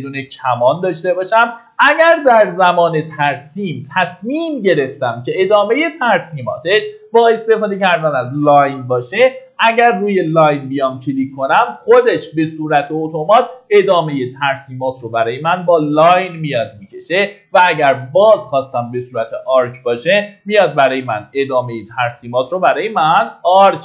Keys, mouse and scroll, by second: 1.7 middle click, 2.2 scroll down 1, 9.2 click.